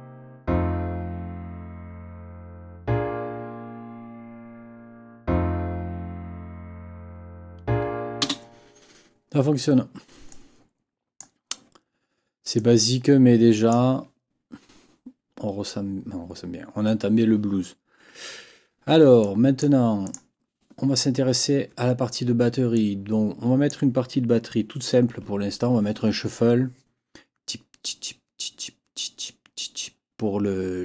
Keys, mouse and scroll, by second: 8.2 space, 10.3 click, 12.5-13.9 drag, 19.2 click, 20.0 click, 22.7 click.